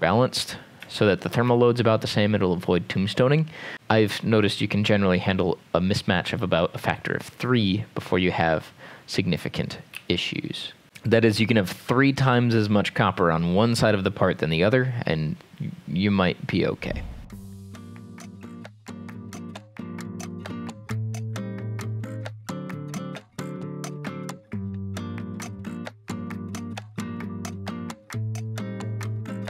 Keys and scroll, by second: 1.4 ctrl+s, 9.9 m, 17.3 ctrl+z, 17.4 Escape, 18.0 Escape, 18.4 ctrl+s, 18.5-24.1 typing, 18.8 Escape, 25.7 Escape, 25.8 Escape, 25.9 ctrl+s, 26.6 x, 27.8 Escape, 29.4 Escape.